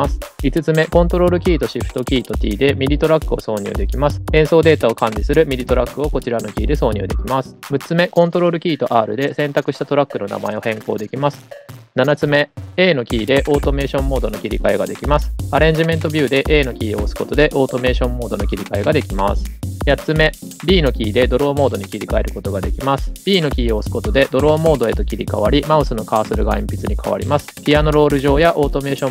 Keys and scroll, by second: 1.3 shift+super+t, 8.2 super+r, 9.3 super+r, 12.4 a, 14.1 a, 20.0 b, 23.1 b, 25.3 b, 26.1 b, 27.1 b.